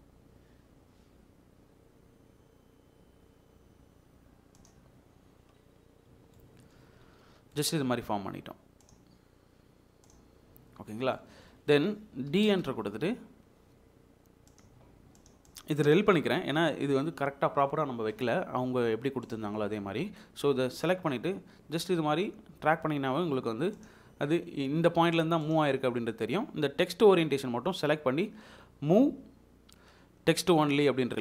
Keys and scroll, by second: 12.3 d, 12.5 space, 16.4 Delete.